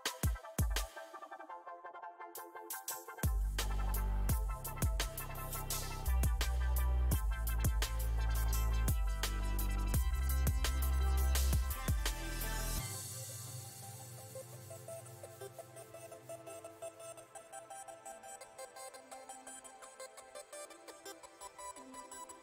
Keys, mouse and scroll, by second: 1.8 f, 2.5 shift+click, 3.4 middle click, 3.8 f, 4.8-6.3 drag, 6.3 middle click, 6.8 f, 7.6-12.1 drag, 12.1-13.4 middle drag, 13.4-15.8 shift+drag, 15.8 f, 16.6-17.8 drag, 17.8 middle click, 18.7-22.4 ctrl+drag.